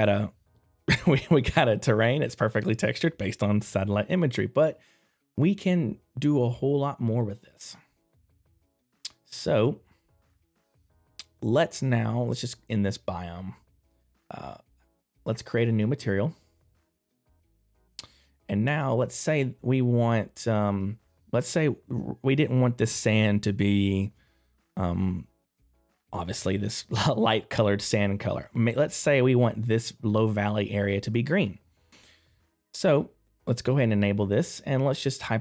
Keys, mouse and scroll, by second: 7.1 click, 9.2 middle click, 9.2 click, 9.8 right click, 10.9 middle click, 10.9 right click, 15.6 click, 17.2 middle click, 17.2 click, 18.0 right click, 20.6 right click, 20.6 middle click, 21.2 click, 21.2 right click, 33.4 click, 33.4 middle click.